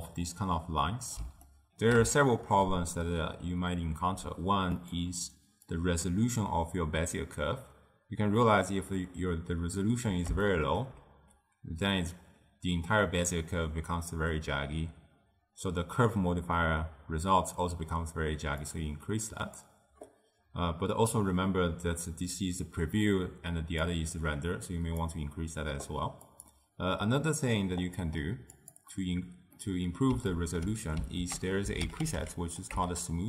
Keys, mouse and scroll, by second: 1.6-4.9 ctrl+middle drag, 4.9 click, 5.8-8.8 drag, 10.5-13.6 shift+middle drag, 18.7-21.8 drag, 23.9-26.5 drag, 27.3-27.9 middle drag, 27.9 click, 28.6 click, 29.7-31.3 middle drag, 31.3 ctrl+a.